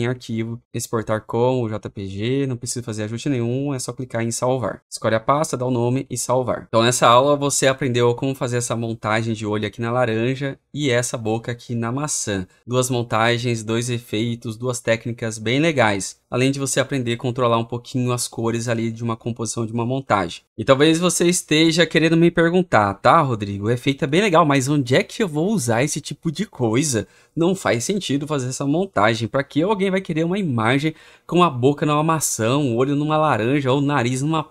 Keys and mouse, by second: 1.6-4.8 drag, 5.8 click, 10.5-14.9 drag, 15.2-16.2 drag.